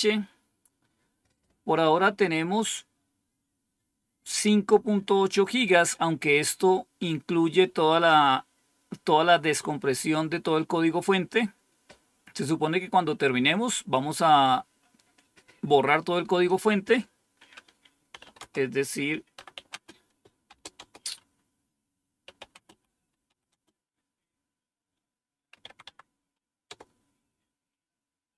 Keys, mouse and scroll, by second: 4.6-5.6 drag, 16.3 click, 16.9 click, 17.8-20.7 typing, 21.9-23.7 typing, 25.4-25.7 typing.